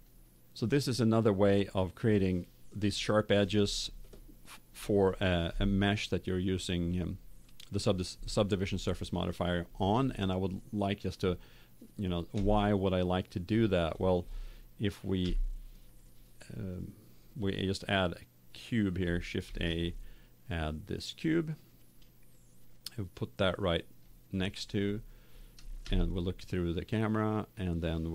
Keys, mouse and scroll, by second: 0.1 click, 1.0 click, 1.2 click, 1.3-2.9 middle drag, 10.7 middle click, 12.4-15.4 middle drag, 15.2 KP_7, 19.4 shift+a, 22.3-24.2 drag, 25.8 KP_0.